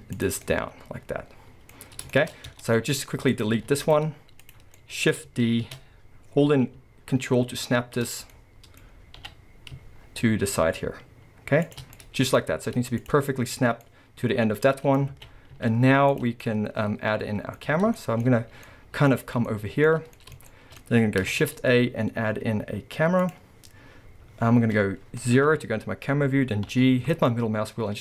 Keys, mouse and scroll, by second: 0.4 scroll, 0.5-3.3 middle drag, 1.7-2.1 scroll, 2.5 Tab, 3.3 click, 3.6 x, 4.4 click, 4.8-8.2 middle drag, 5.6 shift+d, 8.2 right click, 8.3-9.2 scroll, 9.2 middle click, 9.2 g, 10.2-11.8 middle drag, 12.4 scroll, 12.6 z, 13.8 middle click, 15.1 alt+a, 15.2 scroll down 1, 15.6 z, 16.4 middle click, 17.6 scroll up 1, 18.0 shift+middle click, 18.3-18.6 scroll up 1, 18.6 middle click, 19.1 scroll up 1, 19.5 shift+middle click, 20.2 middle click, 20.5-24.6 middle drag, 21.3 shift+a, 25.5 KP_0, 26.7-28.0 middle drag, 26.7 g.